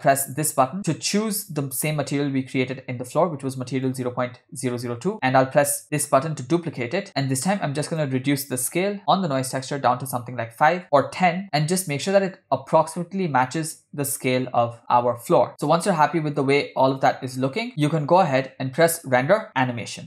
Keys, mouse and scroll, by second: 0.2-4.2 drag, 5.9 click, 7.9-9.7 drag, 10.8 click, 15.5 click, 16.1-16.8 scroll down 1, 16.8-17.1 scroll down 1, 17.2 click, 18.9-20.0 drag.